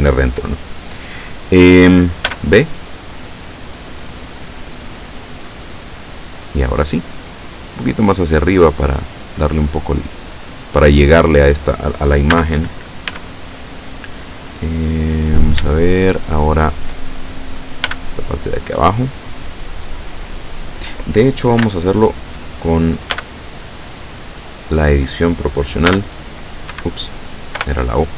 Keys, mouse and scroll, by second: 2.3 b, 2.5 click, 4.5-7.5 drag, 8.0-9.2 drag, 12.3 a, 13.1 b, 15.8-17.1 shift+middle drag, 17.9 b, 18.2-19.4 drag, 21.7 a, 23.2 b, 23.7-24.8 drag, 26.0 b, 26.8 Escape, 27.7 o.